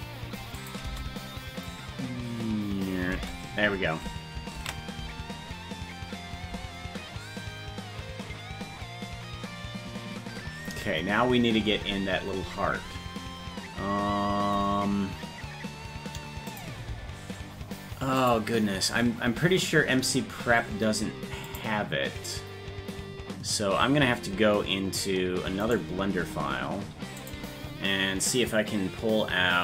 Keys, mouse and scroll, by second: 0.6 click, 0.8 space, 4.8 ctrl+s, 4.8 space, 12.3-13.5 scroll down 1, 13.5-14.0 scroll down 7, 16.5-18.5 drag, 16.5-17.8 scroll up 9, 21.4 click.